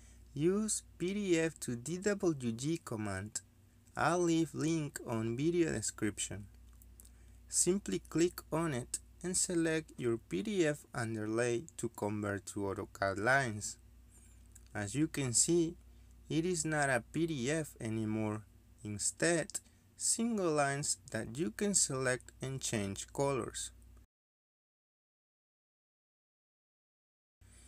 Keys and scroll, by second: 21.1 Escape, 21.5-22.7 typing, 26.6 Escape.